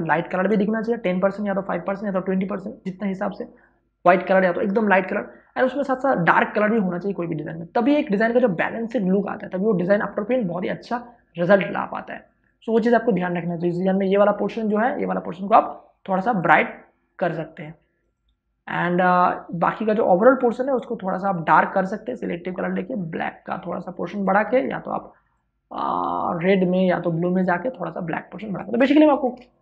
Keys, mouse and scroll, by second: 14.1 w, 15.2 click, 15.5 right click, 16.4-29.0 drag, 29.0 space, 29.1 ctrl+click.